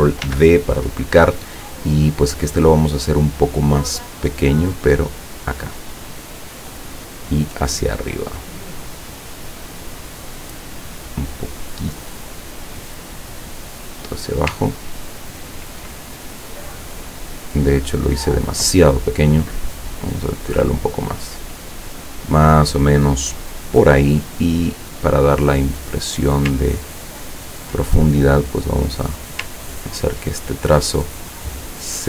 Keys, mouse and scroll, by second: 0.3 ctrl+d, 4.3-6.9 drag, 7.4-10.6 drag, 11.4-14.2 drag, 17.2-19.0 drag, 19.5-22.4 drag, 24.3-26.3 drag, 26.8-27.2 ctrl+scroll down 2, 27.4 ctrl+scroll down 2, 28.4 click, 30.5 ctrl+click, 31.3-32.0 drag.